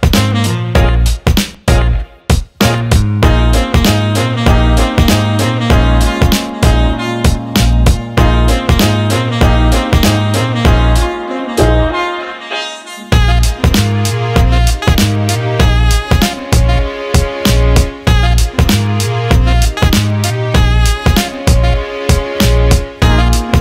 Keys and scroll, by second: 7.7 Up, 7.7 Right, 7.9 Left, 8.0 Right, 12.3 Delete, 17.0 Up, 17.1 Right, 17.2 Left, 21.1-22.8 typing.